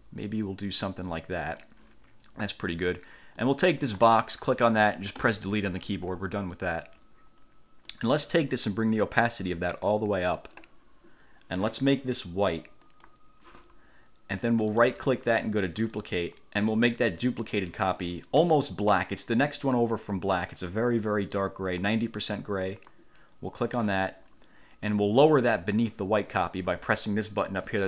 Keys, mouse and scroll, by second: 0.4-1.9 drag, 3.5 click, 5.3 Delete, 6.7-8.3 drag, 9.4-10.9 drag, 13.0 click, 14.9 click, 15.9 click, 22.9 click.